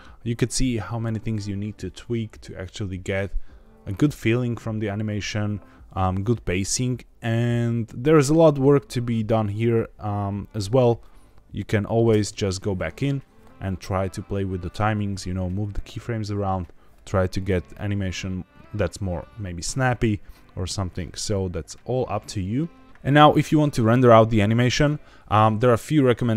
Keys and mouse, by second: 12.1 space, 22.8 ctrl+s.